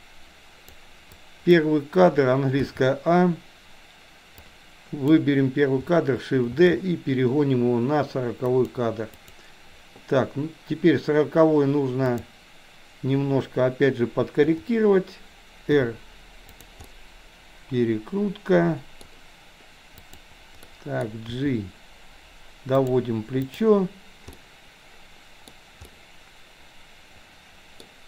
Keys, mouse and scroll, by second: 1.2-1.6 drag, 2.7 a, 4.7 click, 6.6 shift+d, 9.2 click, 12.2 click, 14.4 KP_7, 15.7 r, 16.9-19.1 middle drag, 19.9 click, 20.7-21.1 middle drag, 21.2 g, 23.6 click, 24.4-25.4 middle drag, 25.9-27.8 middle drag.